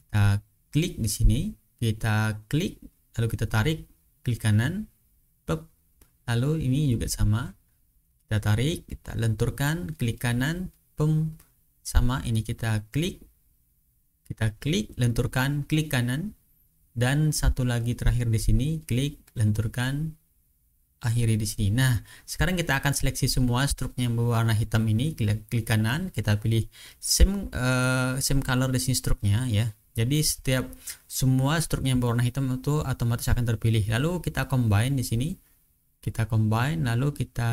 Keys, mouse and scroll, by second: 0.8 click, 2.5-4.9 drag, 6.1 ctrl+scroll up 2, 7.5 click, 8.7-10.2 drag, 10.3 right click, 10.9-11.4 ctrl+scroll down 1, 11.4-12.3 ctrl+scroll up 1, 12.9 click, 14.3-15.5 drag, 15.6 right click, 16.8 ctrl+scroll up 2, 18.0 click, 19.0-20.4 drag, 20.5 right click, 21.8 click, 22.4 ctrl+scroll down 2, 22.9 ctrl+scroll up 2, 24.8 right click, 26.1 click, 29.0 click, 29.8-30.5 ctrl+scroll down 2, 30.5-30.9 ctrl+scroll up 2, 33.2 click, 35.8 click.